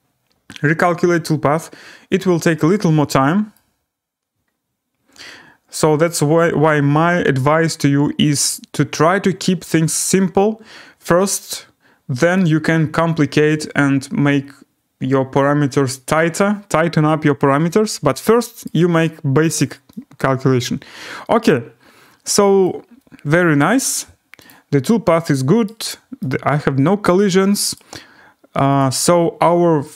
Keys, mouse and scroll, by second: 3.6 right click, 3.8 scroll, 18.6 right click, 18.9 scroll, 22.6 right click, 23.3 scroll, 24.5 click, 25.6 right click, 26.7-27.6 scroll, 27.7 right click, 28.8 click.